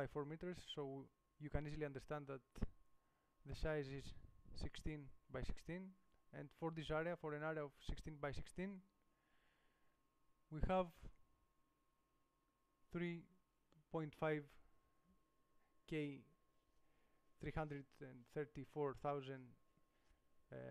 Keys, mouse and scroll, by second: 0.8-5.1 middle drag.